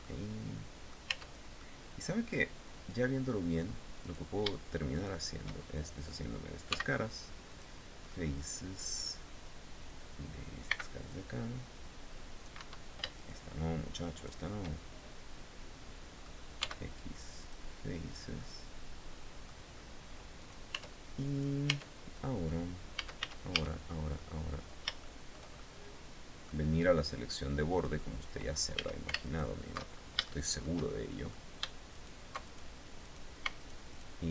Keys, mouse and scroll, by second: 0.7 Tab, 1.1 middle click, 1.5 scroll up 1, 3.6 right click, 4.5 shift+right click, 5.1 shift+scroll up 1, 6.2 x, 7.1 click, 7.6 middle click, 7.6 scroll up 1, 10.2 c, 10.7-12.2 drag, 12.1 Escape, 12.7 shift+right click, 13.7 shift+right click, 14.2-15.9 shift+middle drag, 16.1 x, 16.9 click, 17.5-17.8 scroll down 1, 17.9-19.1 middle drag, 19.9 right click, 20.3 Tab, 20.8 right click, 21.3 Tab, 21.7 middle click, 22.5 a, 23.7-25.1 middle drag, 25.4 middle click, 27.3 click, 28.3 a, 28.8 alt+shift+right click, 29.4 alt+shift+scroll up 1, 29.8 shift+middle click, 30.4 shift+scroll up 1, 31.5 alt+shift+right click, 32.0 alt+shift+right click, 32.6 shift+right click, 33.1 alt+shift+right click, 33.4 alt+shift+middle click, 33.5 alt+shift+right click.